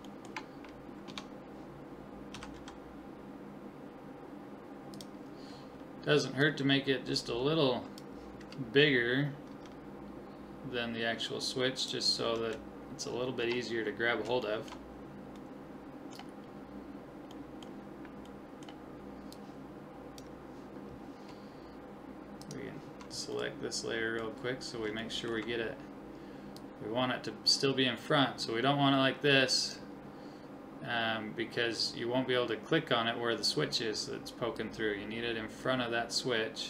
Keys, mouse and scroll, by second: 1.1 Tab, 2.3 s, 6.4-9.5 drag, 9.5 s, 13.4 Tab, 13.9-19.3 middle drag, 19.3 click, 20.0-23.7 drag, 24.1 click, 24.5-26.6 middle drag, 26.6-28.1 drag, 34.6-36.3 drag.